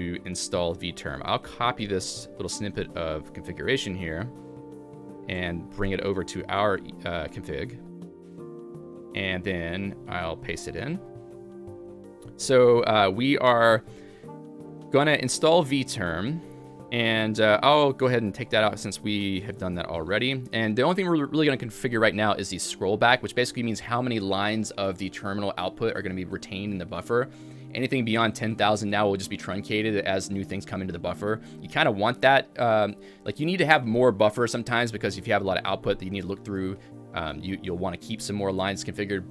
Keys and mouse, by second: 4.3-5.0 typing, 4.5 click, 5.2 ctrl+alt+j, 5.9 ctrl+alt+j, 6.3 ctrl+alt+j, 6.8 Return, 6.9 Escape, 7.2-16.9 typing, 8.4 click, 9.1 Escape, 11.3 click, 12.9 click, 17.8 alt+/, 18.4 Escape, 18.8-22.5 typing, 24.4-25.2 typing, 27.4-28.2 typing, 29.4-35.1 typing, 37.6-38.3 typing.